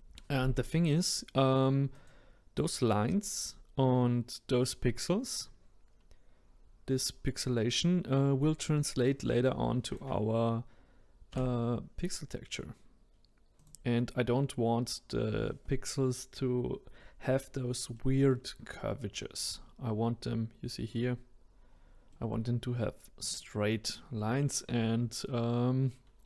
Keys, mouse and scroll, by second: 0.0-1.9 middle drag, 1.9 click, 3.3-3.8 scroll up 2, 5.3-6.9 scroll down 2, 9.8 click, 11.3 s, 17.9 middle click, 18.6-19.1 scroll down 1, 19.1 middle click, 19.4-20.1 scroll up 1, 20.1-21.1 scroll up 5, 21.6-22.1 scroll down 2, 22.1-23.2 middle drag, 23.2 click.